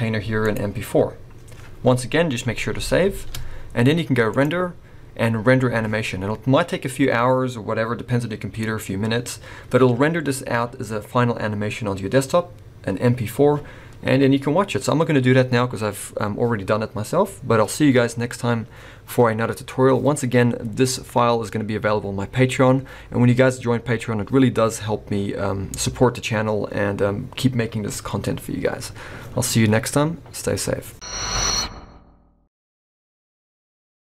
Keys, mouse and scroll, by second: 2.8 ctrl+s, 3.1 ctrl+s, 4.3 click.